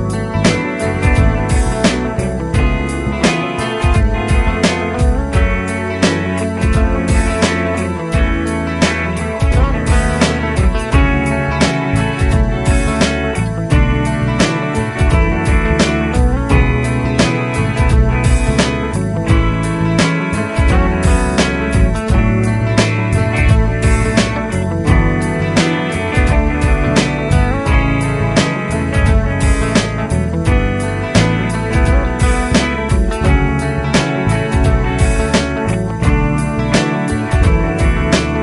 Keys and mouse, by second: 2.1 double click, 9.2 right click, 11.9 |, 12.5 |, 12.7 ┤.